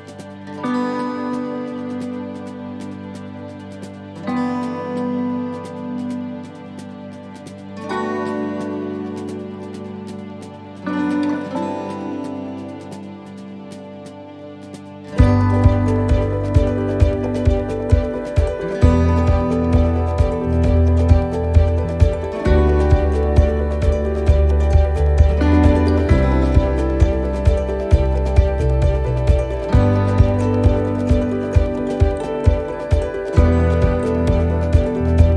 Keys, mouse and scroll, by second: 1.5 scroll down 2, 1.9 middle click, 3.0 middle click, 3.5-3.8 scroll up 2, 4.1 shift+middle click, 5.3 middle click, 5.7 middle click, 6.3 scroll up 1, 7.4 ctrl+r, 10.7 click, 11.7 right click, 12.0 middle click, 13.0-13.3 scroll up 2, 13.3 middle click, 13.6 shift+middle click, 14.1 middle click, 14.8 shift+right click, 15.2 middle click, 16.3 e, 16.7 s, 18.5 middle click, 20.0 click, 22.7 s, 28.1 middle click, 28.5 scroll down 2, 28.9 middle click, 29.3 shift+middle click, 30.0 scroll up 1, 30.9 shift+middle click, 30.9 scroll up 1, 33.1 shift+middle click.